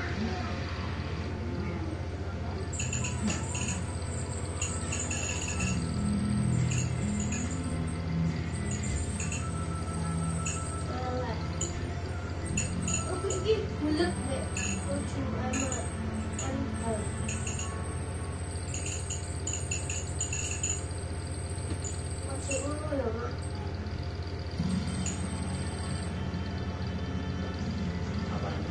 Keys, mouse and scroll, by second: 1.2 click, 2.6-4.1 drag, 4.7 Delete, 6.2-6.8 ctrl+scroll up 2, 7.9-8.5 scroll up 1, 8.9 click, 11.5 click, 12.4 click, 16.5 click, 18.1 click, 20.1 click, 21.4-21.9 scroll down 1, 22.5-23.9 drag, 26.4 ctrl+click, 27.7 click, 28.4 click.